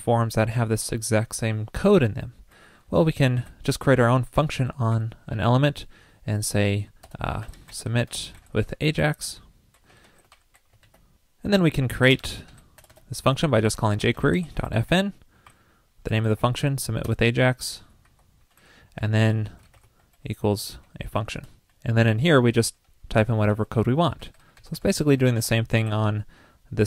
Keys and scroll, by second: 3.4 super+x, 10.9 super+c, 10.9 super+s, 23.5 super+v.